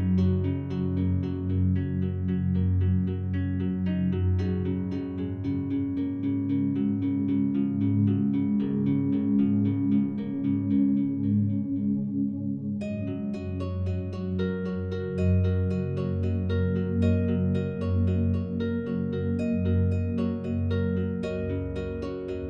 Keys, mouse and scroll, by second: 0.0 a, 0.7 alt+a, 1.0-8.7 alt+drag, 8.7 alt+shift+right click, 9.8 a, 10.0 a, 11.5 alt+shift+right click, 12.2 alt+click, 16.8 a, 17.3 a, 17.5-20.9 alt+drag, 20.9 alt+shift+right click.